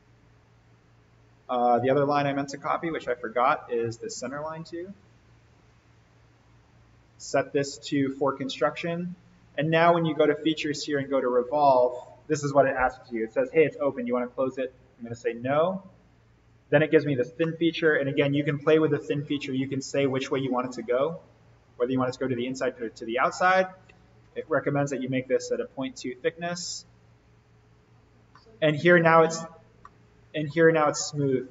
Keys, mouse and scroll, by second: 0.6 right click, 1.6 click, 2.8 alt+v, 3.8 click, 5.6 alt+v, 6.4-7.1 drag, 14.5 click, 15.8 click, 17.1 scroll down 1, 17.3-18.6 middle drag, 18.8-20.1 scroll down 1, 20.1 click, 24.4 Tab, 25.1-26.4 scroll up 1, 26.6 click, 28.2-29.2 middle click, 29.2-29.7 scroll down 1, 29.7-30.7 middle drag.